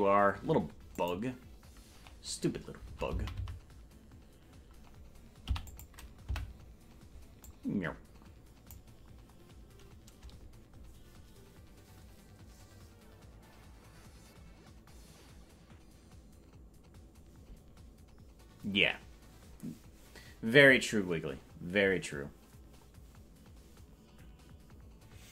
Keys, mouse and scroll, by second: 1.0 click, 1.0 right click, 3.0 Right, 3.3 Right, 3.5 Right, 5.4 i, 6.4 Right, 7.4-8.8 drag.